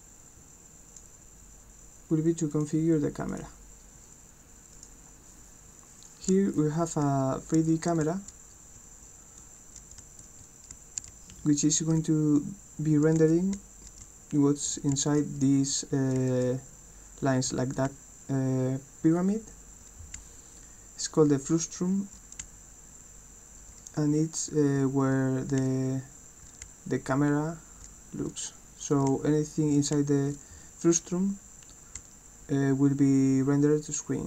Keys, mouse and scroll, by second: 4.7 click, 6.1-28.4 right drag, 7.0 w, 7.6 d, 8.0 s, 8.8 a, 10.0-11.9 typing, 13.6-17.9 typing, 20.2 d, 22.5 d, 24.5 s, 25.1 w, 25.6 d, 26.7 d, 27.2 w, 28.8-30.3 typing, 29.0-34.2 right drag, 32.0 d.